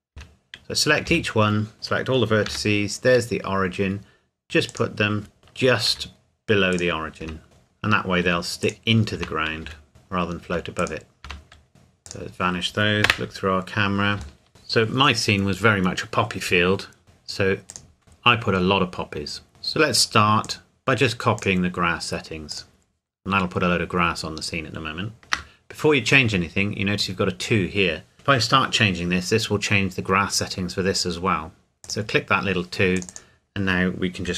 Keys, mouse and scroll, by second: 0.2 Tab, 1.1 a, 2.5 g, 4.7 click, 5.4 KP_3, 5.9 Tab, 6.8 click, 7.2 Tab, 7.4 click, 8.2 Tab, 8.6 click, 9.2 Tab, 9.7 a, 9.9 click, 10.5 Tab, 10.8 click, 11.2 click, 11.7-12.1 scroll down 1, 12.1 click, 13.1 KP_0, 14.4 shift+middle click, 17.0 click, 20.4 click, 25.2 ctrl+z, 31.8 click.